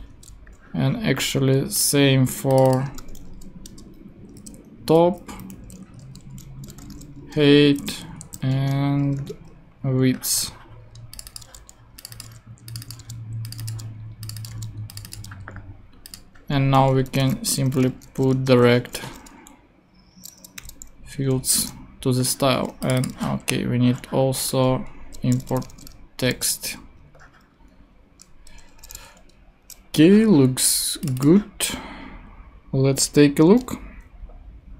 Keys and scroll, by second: 2.9 t, 3.6 Return, 4.4 alt+Return, 4.8 Down, 5.6 alt+Left, 5.9 alt+shift+Right, 6.7 alt+shift+h, 6.7 e, 7.1 Return, 7.6 Down, 7.8 Left, 8.5 alt+shift+e, 9.0 BackSpace, 9.1 w, 9.3 Return, 12.2 super+v, 13.0 super+c, 13.6 super+v, 14.5 super+c, 15.1 super+v, 17.0-18.8 typing, 19.8 alt+,, 20.5 alt+super+l, 24.9 Right, 25.5 ,, 25.6 space, 26.3 shift+super+v, 27.3 super+v, 28.8 alt+super+l.